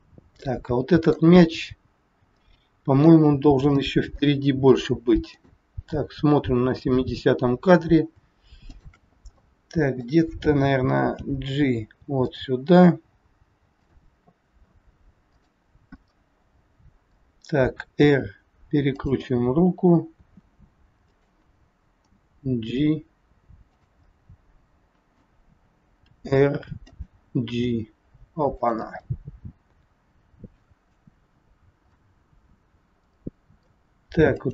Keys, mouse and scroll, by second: 0.3 middle click, 2.4 middle click, 3.3-3.7 scroll up 2, 3.9 shift+middle click, 4.1 shift+middle click, 5.2 click, 6.7 click, 8.7 shift+click, 9.3 middle click, 11.2 g, 13.7 click, 15.2 click, 15.9 middle click, 18.1 r, 19.3 middle click, 20.3 r, 22.1 g, 24.1 middle click, 26.0 r, 27.5 g, 29.0 middle click, 34.3 middle click, 34.3 click.